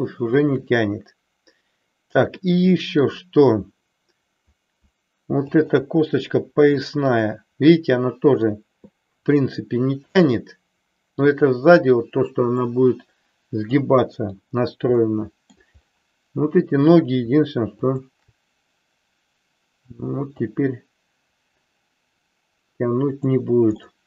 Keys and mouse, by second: 2.5 middle click, 5.5 shift+click, 7.1-8.6 middle drag, 9.3-11.4 middle drag, 12.0 middle click, 13.6 middle click, 14.9 middle click, 17.7 shift+click, 20.5-23.4 drag, 23.8 middle click.